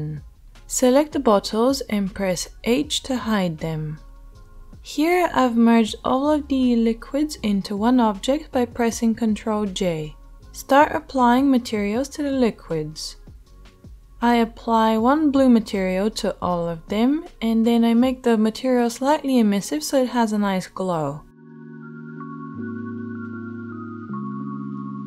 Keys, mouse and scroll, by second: 0.6 middle click, 0.7-10.5 right drag, 1.8 h, 5.9 g, 7.8 ctrl+j, 10.5-11.5 middle drag, 11.5-12.6 right drag, 12.6-14.7 shift+middle drag, 14.7-22.6 right drag, 22.6-24.1 middle drag, 24.1-25.0 right drag.